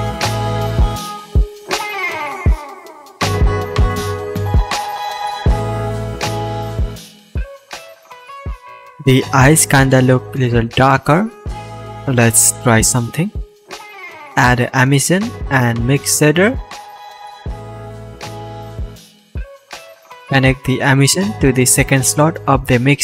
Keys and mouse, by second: 0.8 middle click, 1.2 click, 1.7-3.3 middle drag, 3.3 click, 4.1-5.4 drag, 4.1-5.4 middle drag, 4.1-5.4 right drag, 6.0 shift+a, 7.2-7.7 ctrl+drag, 7.3 ctrl+z, 9.1 shift+a, 12.8 shift+a.